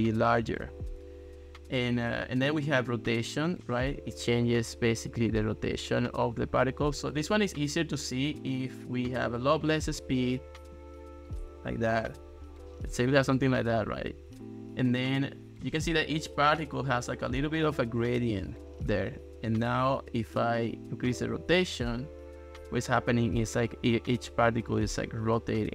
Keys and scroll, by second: 24.8 ctrl+s.